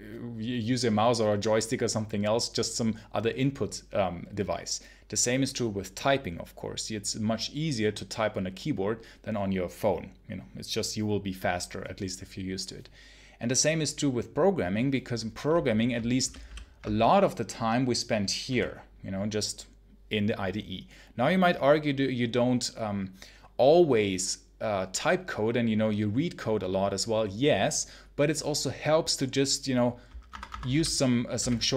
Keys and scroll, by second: 16.2 ctrl+super+h, 16.3 ctrl+super+h, 30.2 Escape, 30.6 k, 31.2 j, 31.6 h.